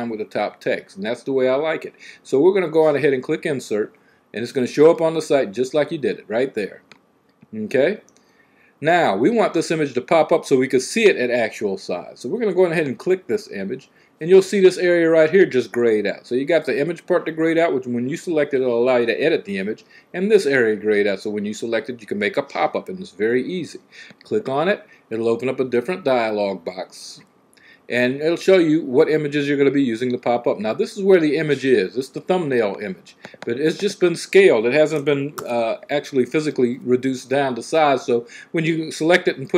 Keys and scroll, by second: 35.1 c.